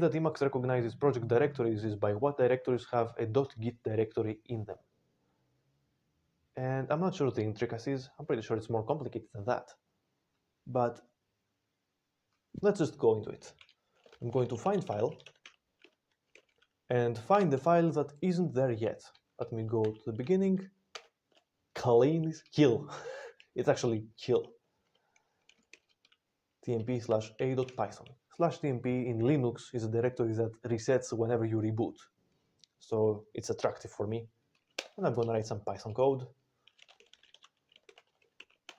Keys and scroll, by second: 14.0-16.8 typing, 17.2 Return, 19.8 ctrl+a, 20.8 ctrl+k, 27.0-28.0 typing, 34.6 Return, 37.5-38.7 typing.